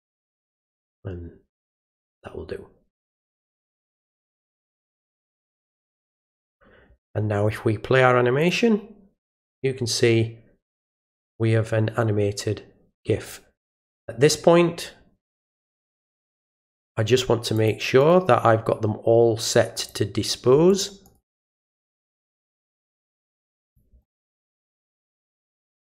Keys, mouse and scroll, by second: 3.9 click, 6.4 click, 8.4 click, 16.3 click, 17.6 click, 18.0 right click, 19.8 click, 20.7 click, 21.1 right click, 21.8 click, 22.3 click, 23.6 click, 24.0 right click, 24.8 click, 25.5 click, 25.7 right click.